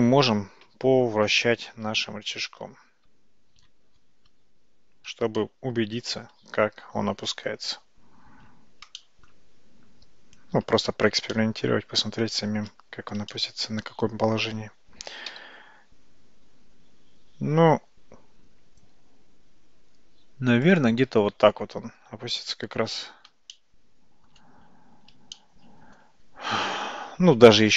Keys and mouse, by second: 0.7 Tab, 1.6 Tab, 2.6 `, 5.4-6.2 right drag, 9.0 shift+right click, 11.4 shift+right click, 13.4-14.4 shift+middle drag, 15.4 r, 23.6-24.4 shift+middle drag, 25.4-26.0 shift+middle drag.